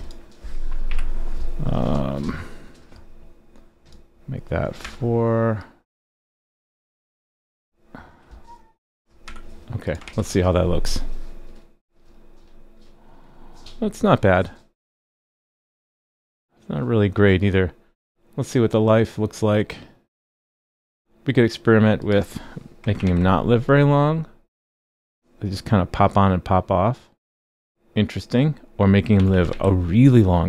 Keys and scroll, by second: 10.0 super+s, 23.0 super+s, 29.5 super+s.